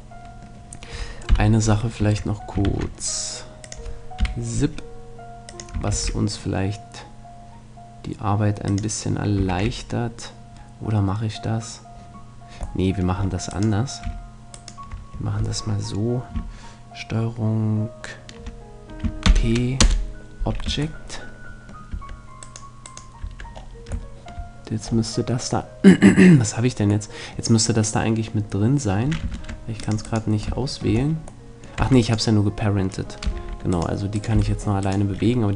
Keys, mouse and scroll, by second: 1.3 KP_1, 2.7 shift+c, 3.7-7.2 drag, 4.2 KP_3, 5.9 shift+a, 8.7-10.3 drag, 9.5 shift+a, 12.9 middle click, 13.5-16.5 right drag, 19.3 ctrl+p, 20.7 Tab, 21.9 Tab, 22.5-24.5 right drag, 23.3 Tab, 29.3 ctrl+Tab, 30.1-31.6 right drag, 30.6-31.6 middle drag, 31.8 Tab, 33.3 g, 34.3 g, 34.7-35.5 right drag, 35.1-35.5 drag.